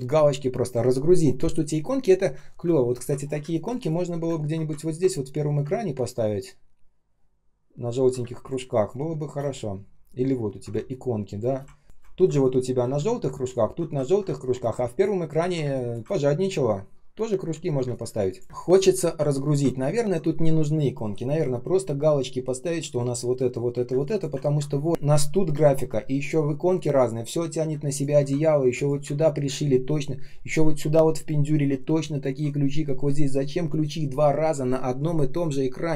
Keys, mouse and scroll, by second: 2.3 space, 3.1 ctrl+scroll down 1, 3.3 space, 3.8 space, 4.2 ctrl+scroll up 1, 7.0 ctrl+scroll down 1, 8.1 space, 8.6 space, 9.4-9.7 ctrl+scroll up 1, 10.3 ctrl+scroll down 1, 10.6 space, 11.2 space, 11.6 space, 11.6 ctrl+scroll up 1, 11.8 space, 12.1 ctrl+scroll down 1, 13.1 ctrl+scroll up 1, 14.0 ctrl+scroll down 1, 14.1 space, 14.7 space, 16.0 ctrl+scroll up 1, 16.6 ctrl+scroll down 1, 17.7 space, 18.2 space, 18.3 space, 18.4 ctrl+scroll down 1, 19.2 ctrl+scroll up 1, 23.8 space, 24.3 ctrl+scroll down 1, 27.6 space, 28.6 ctrl+click.